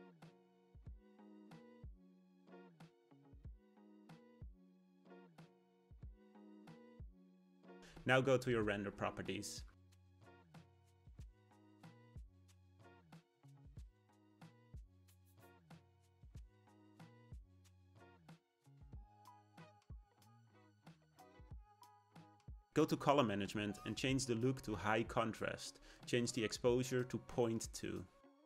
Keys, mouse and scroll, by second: 2.4-5.4 scroll up 1, 6.7 click, 9.3 click, 16.5-18.7 drag, 18.7-21.4 scroll down 1, 21.4-24.5 drag, 27.4-28.4 drag.